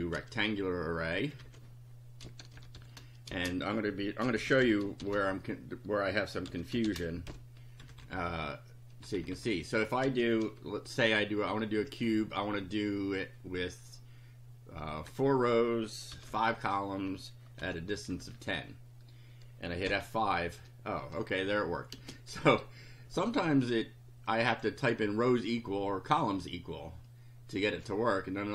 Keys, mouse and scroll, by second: 0.1 ctrl+c, 1.0 ctrl+click, 1.4 ctrl+v, 2.3-7.7 typing, 7.8 Left, 10.1 space, 15.1 KP_4, 16.2 ,, 16.4 KP_5, 17.6 ,, 18.2 KP_0, 19.8 F5, 22.0 space, 22.4 Down, 24.3 click.